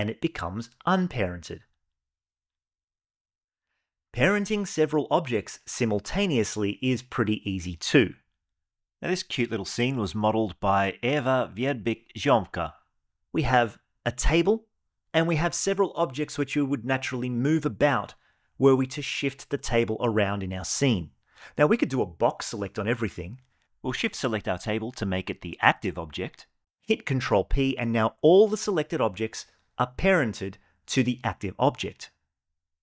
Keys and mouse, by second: 0.4 click, 0.8 g, 2.5 click, 21.8-23.3 drag, 24.6 shift+click, 25.0 shift+click, 26.7 ctrl+p, 28.7 click, 29.6 g.